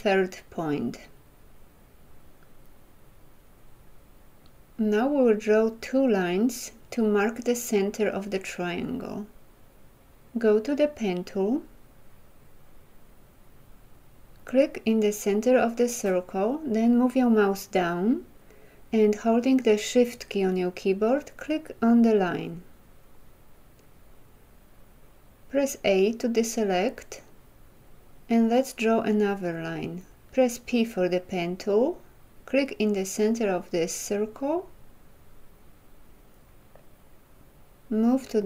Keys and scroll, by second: 25.8 a, 30.5 p.